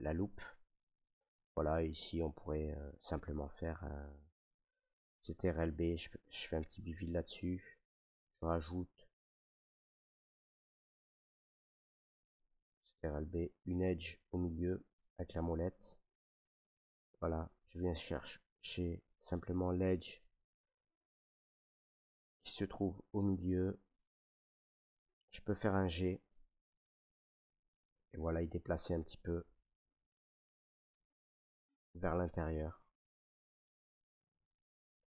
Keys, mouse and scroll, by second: 0.5 middle click, 1.2 shift+middle click, 1.4 shift+middle click, 2.9 middle click, 3.7 shift+middle click, 3.9 middle click, 5.6 ctrl+b, 10.2 click, 10.9 middle click, 11.3 middle click, 11.8 ctrl+z, 13.0 ctrl+b, 14.3 middle click, 16.7 click, 17.4 click, 19.2 right click, 20.1 shift+middle click, 20.5 middle click, 20.7 middle click, 20.7 shift+middle click, 21.5-22.3 shift+middle drag, 22.9 ctrl+right click, 24.2 middle click, 25.1 shift+middle click, 25.9 middle click, 27.0 g, 29.4 right click, 30.3 middle click, 30.5 g, 33.0 click, 33.3 middle click, 33.3 middle click, 33.5 Tab, 33.9 middle click, 34.0 middle click, 34.8 middle click, 35.0 middle click, 35.0 middle click.